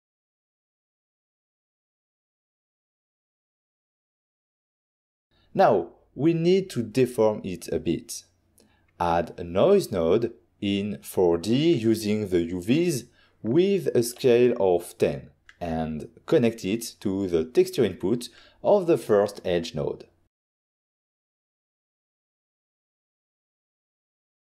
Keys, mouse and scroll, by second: 1.6 typing, 2.8 Return, 4.3 click, 6.1 click, 6.6 click, 7.0 middle click, 7.2 middle click, 8.0 ctrl+middle click, 9.2 click, 9.3-10.4 typing, 9.5 click, 10.9 Return, 12.6 click, 13.4 middle click, 13.6 middle click, 13.8 middle click, 13.8 scroll down 1, 14.2 middle click, 14.6 middle click, 16.4 click, 19.7 click, 20.1 g, 20.5 click, 20.7 click, 20.7 scroll down 1, 20.8 middle click, 21.1 scroll up 1, 21.7 click, 23.4 click.